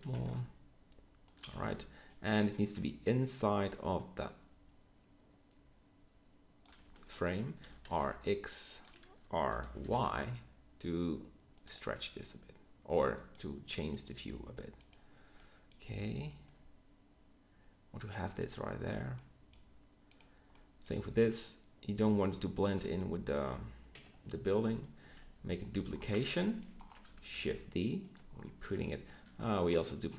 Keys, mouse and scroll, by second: 0.1 g, 1.4 z, 7.5 r, 9.4 r, 22.7-23.1 right drag, 23.9 KP_3, 24.6 z, 25.0 b, 26.2 b, 27.2 shift+d.